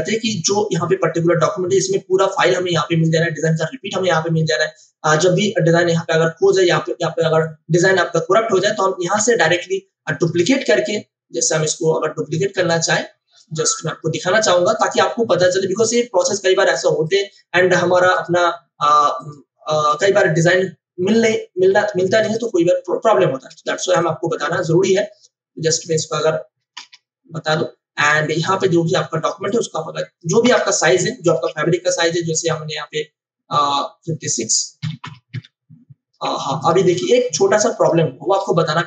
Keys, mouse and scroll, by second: 2.2 click, 9.4 click, 10.0 right click, 12.6 click, 14.4 right click, 17.0 click, 22.2 click, 23.4 v, 23.9-25.7 drag, 26.7 ctrl+BackSpace, 27.9 click, 28.0 click, 28.9 ctrl+t, 29.4 click, 30.4 Return, 31.3 ctrl+alt+c, 32.3 click, 35.3 Return, 36.2 space, 36.5 ctrl+alt+click, 37.3-38.8 drag.